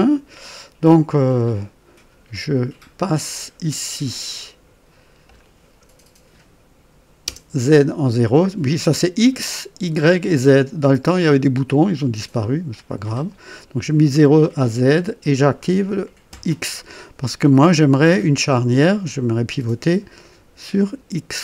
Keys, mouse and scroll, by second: 2.5-5.5 drag, 7.2 KP_0, 14.7 click, 16.3 KP_1.